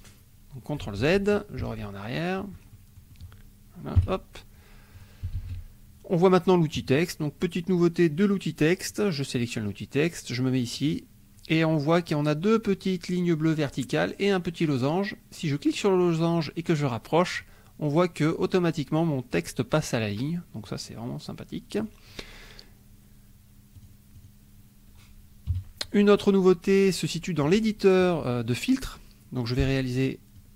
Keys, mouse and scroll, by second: 0.0 click, 1.0 ctrl+z, 2.7 ctrl+click, 3.9 KP_5, 4.9 click, 5.3 ctrl+s, 8.9 click, 10.7 click, 15.5-17.5 drag, 20.6-22.0 drag, 23.7 click, 24.1 click, 25.5 KP_5, 26.4 click, 30.3 click.